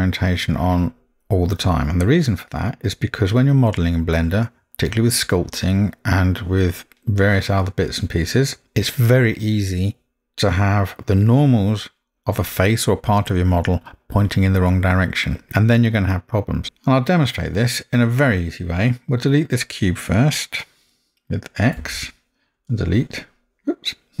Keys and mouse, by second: 16.7 middle click, 21.8 x.